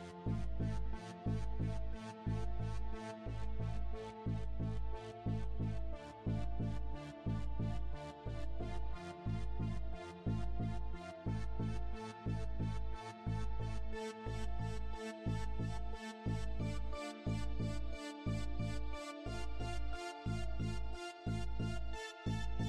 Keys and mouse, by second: 0.2 shift+d, 1.0-2.6 drag, 4.3 KP_7, 5.3 r, 7.8 r, 10.1 r, 11.3-12.9 drag, 13.6 click, 14.5 KP_0, 19.6 click, 21.2 click.